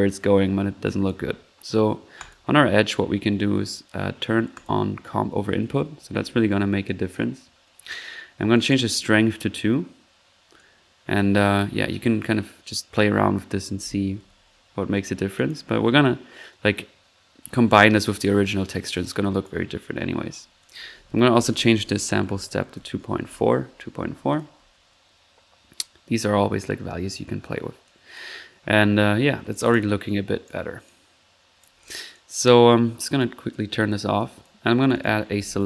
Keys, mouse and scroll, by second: 0.8-1.2 drag, 1.5 middle click, 2.1 click, 2.6 drag, 4.5 click, 6.1 1, 6.8-7.4 drag, 8.5 click, 10.5-14.0 drag, 14.2 ctrl+z, 15.0-15.3 ctrl+middle drag, 15.3-16.1 typing, 15.5-15.8 ctrl+drag, 16.0 ctrl+drag, 16.2 middle click, 19.3 click, 19.3-20.1 typing, 20.6 drag, 24.2-25.0 typing, 24.3 drag, 26.1 scroll up 1, 27.5-28.6 typing, 27.8 click, 28.2 click, 29.3 middle click, 29.5 click, 31.6-32.0 drag, 32.1-32.5 drag, 33.1 drag, 33.5 click, 34.1 click, 34.8 click, 35.1-35.6 typing.